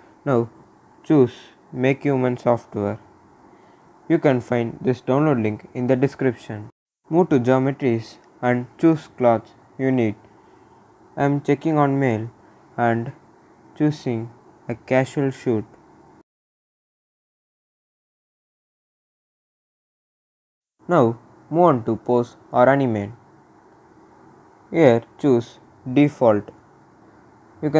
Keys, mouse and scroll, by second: 0.6-1.2 scroll down 1, 3.5 click, 6.1 click, 11.2 click, 13.6 click, 22.7 click, 26.3 click.